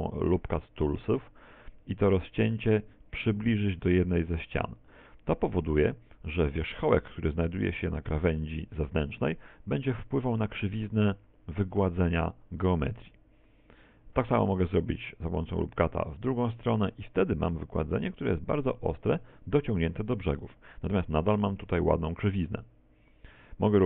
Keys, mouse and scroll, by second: 6.6 click, 14.7 ctrl+r, 19.3 Tab, 19.3 click, 23.4 Tab.